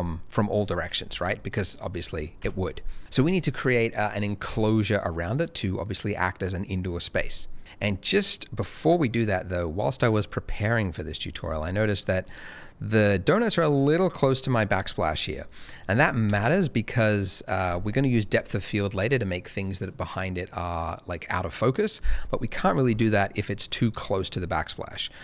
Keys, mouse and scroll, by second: 0.2 double click, 2.4 Escape, 10.2 middle click, 10.4-10.7 scroll down 1, 11.3 click, 11.7 middle click, 13.0 click, 14.6 double click, 15.2-15.5 scroll down 1, 15.5 middle click, 15.9 click, 16.3 shift+click, 22.8 g, 22.9 middle click, 24.2 click, 25.1 middle click.